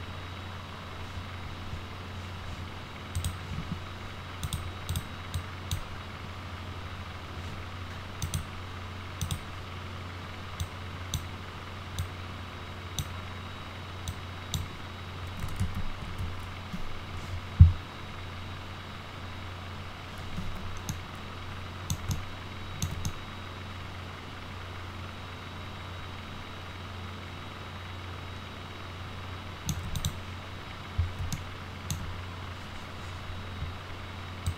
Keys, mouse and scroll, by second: 3.2 click, 4.4 click, 4.9 click, 5.4-5.7 drag, 8.2 click, 9.2 click, 10.6-11.1 drag, 12.0 click, 14.1 click, 15.6 ctrl+z, 20.4 alt+q, 20.9-21.9 alt+middle drag, 22.1-22.8 ctrl+alt+middle drag, 23.0-29.7 alt+middle drag, 30.0 click, 31.3 alt+middle click, 34.5 click.